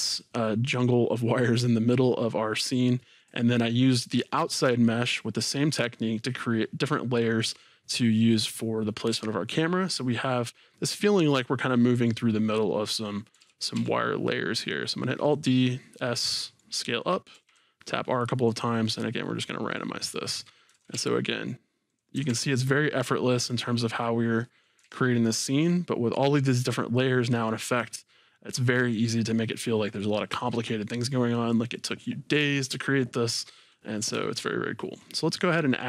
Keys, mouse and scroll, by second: 0.0-1.6 middle drag, 3.2 click, 13.4 alt+d, 15.5 click, 16.2-17.3 middle drag, 17.3 r, 18.6 click, 18.9-20.8 middle drag, 22.0 click, 22.1 r, 23.7 click, 24.4 middle click, 24.8 alt+a, 25.2-25.7 scroll up 2, 25.7-29.8 middle drag, 33.9-34.2 scroll down 2, 34.2-35.4 shift+middle drag.